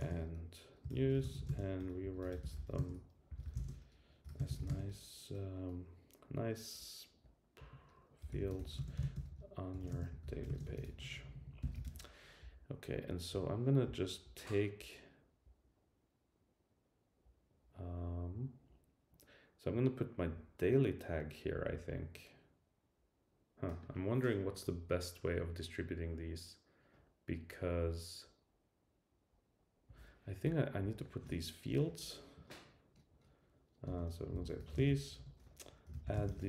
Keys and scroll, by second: 13.3 Tab.